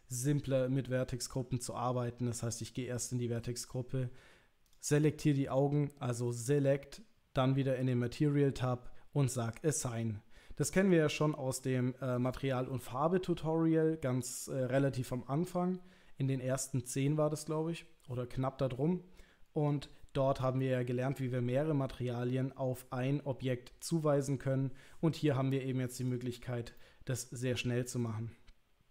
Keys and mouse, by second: 2.6 click, 4.7 click, 10.9 click, 26.0 click, 26.8 middle click, 28.4 click.